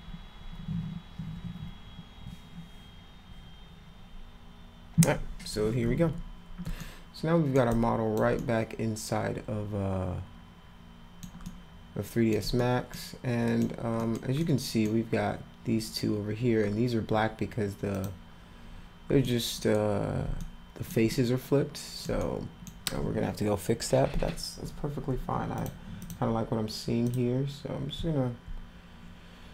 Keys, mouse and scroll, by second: 6.8 alt+middle click, 7.7-8.1 alt+drag, 8.4-11.2 alt+middle drag, 11.4 alt+middle click, 12.6 middle click, 13.4 middle click, 14.0 middle click, 14.4 middle click, 17.3-17.8 scroll up 2, 17.9 click, 19.2 middle click, 20.4 alt+middle click, 21.1 alt+middle click, 22.2 middle click, 25.6 click, 26.0 click, 27.0 click.